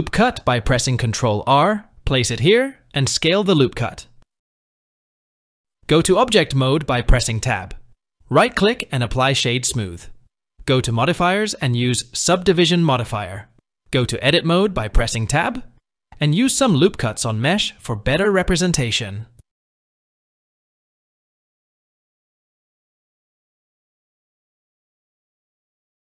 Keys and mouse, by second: 0.1 ctrl+r, 2.7 s, 7.4 Tab, 8.6 right click, 10.7-13.3 drag, 14.7 Tab, 15.8 ctrl+r, 19.0 ctrl+r, 21.1 click, 22.1 ctrl+r, 25.9 5.